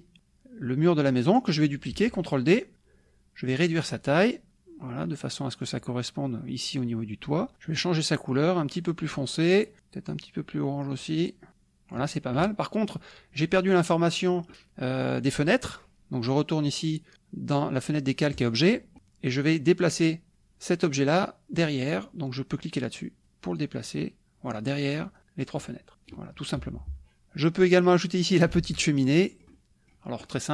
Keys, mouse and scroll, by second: 3.7 click, 4.5-5.8 drag, 8.3-11.2 drag, 11.5 click, 18.3 click, 22.9 click, 23.2 click, 23.7 click, 24.5 click, 25.1 click, 25.9 middle click, 26.3-26.8 scroll down 2, 26.7 KP_Subtract, 27.2 alt+Tab, 28.6 alt+Tab, 29.2 alt+middle click, 29.7 middle click.